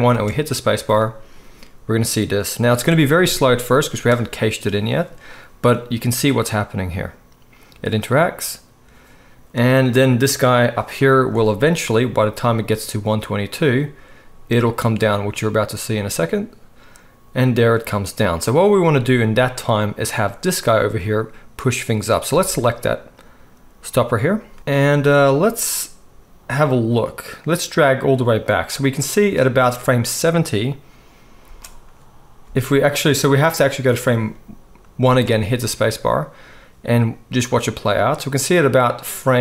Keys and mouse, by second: 0.1 space, 22.3 space, 24.2 middle click, 25.1-39.4 drag, 31.5 space, 33.7 space, 35.8 space.